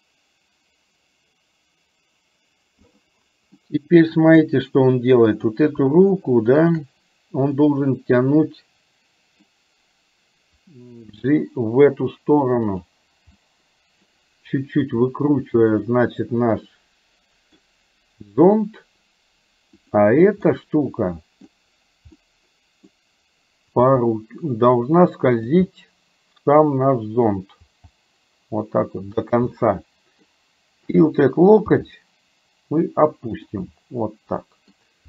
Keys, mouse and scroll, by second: 3.8 middle click, 5.4 click, 6.6 shift+click, 7.6-9.5 middle drag, 11.1 g, 13.4-14.1 scroll up 1, 14.1 scroll down 1, 14.2 middle click, 14.9 r, 16.8 middle click, 20.5-21.5 middle drag, 22.3 middle click, 23.9 g, 25.8-27.4 middle drag, 27.6 g, 29.5 middle click, 31.0 click, 31.8 g, 33.6-34.8 middle drag.